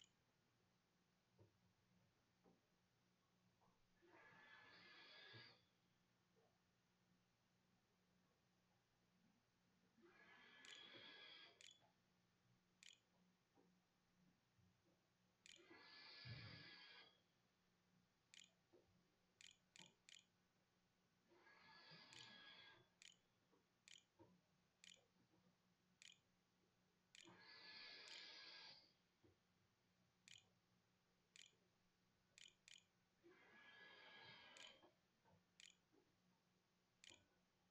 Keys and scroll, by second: 0.0-0.2 typing, 0.3 Tab, 5.9-7.0 typing, 10.2-17.1 typing, 17.1 shift+Delete, 17.3 shift+Return, 18.6 Return, 18.7 Delete, 18.9-37.0 typing.